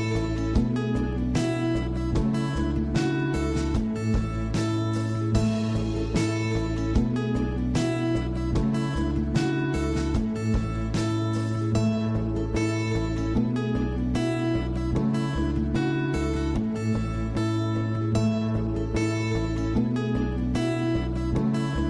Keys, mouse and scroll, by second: 1.3-2.7 scroll down 3, 2.7-3.2 scroll up 5, 3.2-5.6 middle drag, 5.6-6.8 drag, 6.8 scroll down 2, 7.3-7.7 scroll up 1, 8.2-10.0 drag, 10.5 scroll down 3, 10.8-11.5 middle drag, 11.5 scroll up 3, 11.7-14.0 middle drag, 14.0 scroll up 1, 14.2 scroll down 3, 14.3 scroll up 1, 14.4-15.5 middle drag, 15.5 scroll down 1, 15.7-18.1 middle drag, 18.1 scroll up 3, 18.4-19.5 middle drag, 19.5-20.0 scroll up 3, 20.0-20.5 scroll down 3, 20.5 Tab, 20.9 scroll down 2, 21.2-21.8 middle drag.